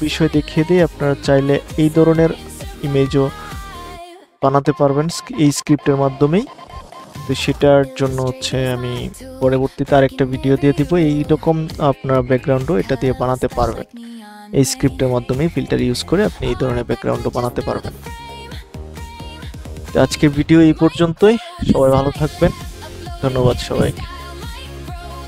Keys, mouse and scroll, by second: 5.1 click, 6.1 scroll down 1, 7.8 click, 12.0 click, 12.9-14.4 scroll down 1, 14.4-17.6 scroll up 1, 17.6 click.